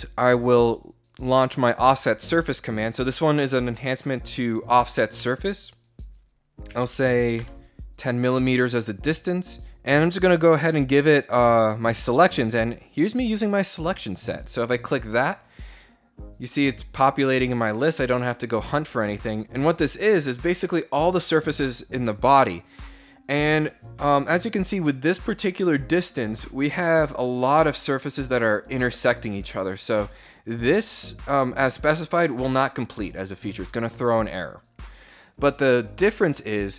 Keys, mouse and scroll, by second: 0.7 click, 5.5 click, 7.0 Return, 8.2 click, 9.4 click, 26.4 scroll down 2, 27.2 scroll down 2, 28.9-30.0 scroll up 8, 30.2 middle click.